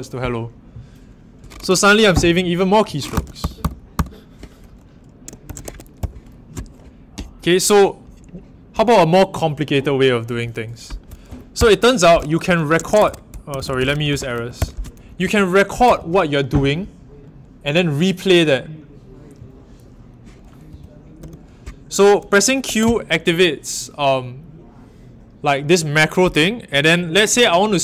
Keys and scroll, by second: 3.1-3.9 typing, 5.2-6.1 typing, 11.2 Up, 11.5 typing, 12.6-16.3 typing, 20.4-22.6 typing.